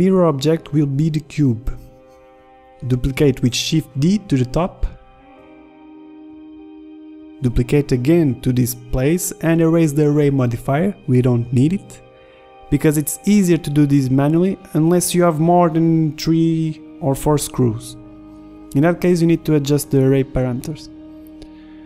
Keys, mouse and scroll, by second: 2.9-4.4 middle drag, 5.3 shift+d, 7.3 z, 7.3 g, 7.3 KP_1, 7.9 g, 12.7 click, 13.1 click, 13.6 click, 14.3 Left, 14.4 Left, 14.9 KP_3, 15.8 click, 16.6 click, 16.9 ctrl+z, 17.0 click, 17.4 ctrl+z, 18.2 KP_1, 18.4 z, 18.6 middle click, 20.0-21.8 drag, 21.5 Tab.